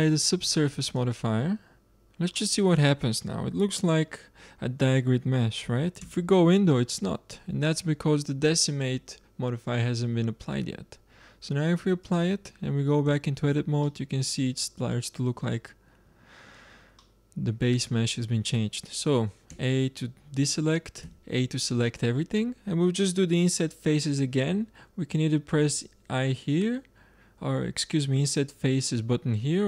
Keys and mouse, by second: 0.7-2.7 drag, 5.9 Tab, 10.4 Tab, 12.0-13.7 drag, 13.0 Tab, 13.7 middle click, 16.9-19.4 middle drag, 19.4 a, 20.9 a.